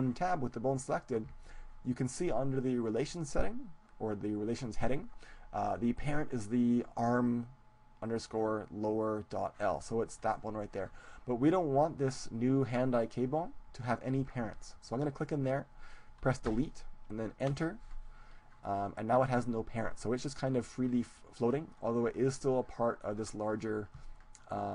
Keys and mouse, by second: 15.2-17.0 drag.